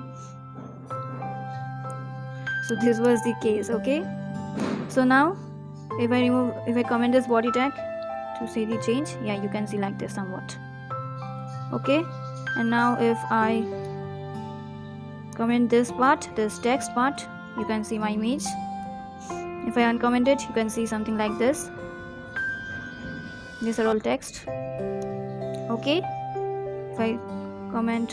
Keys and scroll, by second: 0.4 ctrl+s, 1.4 Down, 1.5 Down, 1.7 Down, 1.9 Down, 2.1 Up, 7.6 ctrl+/, 14.7 ctrl+/, 17.2 ctrl+/, 23.8 ctrl+/.